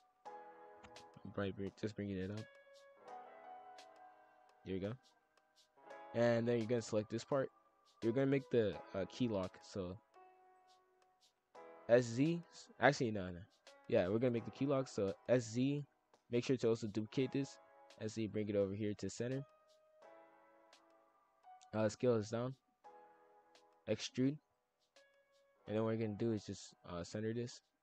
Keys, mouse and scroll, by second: 0.9 click, 3.7 click, 4.0 middle click, 4.7 KP_5, 5.0 scroll up 1, 5.4 shift+middle click, 5.8 scroll up 1, 6.0 click, 6.4-7.3 scroll up 1, 7.3 shift+middle click, 7.8 shift+d, 9.4 s, 10.8 s, 12.7 g, 13.0 ctrl+z, 13.2 ctrl+z, 13.6 click, 14.1 shift+d, 14.4 g, 15.3 s, 17.4 g, 18.9 middle click, 19.3 scroll down 1, 20.2 click, 21.4 s, 22.3 click, 23.7 e, 25.1 ctrl+l, 25.4 KP_5, 25.5 KP_1, 25.9-26.6 scroll up 6, 26.6 s, 27.0 g.